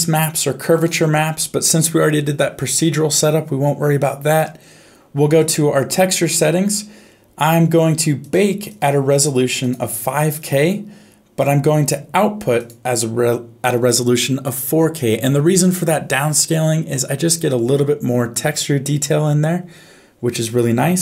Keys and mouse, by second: 0.7 click, 5.4 click, 8.7 click, 9.7 click, 12.6 click.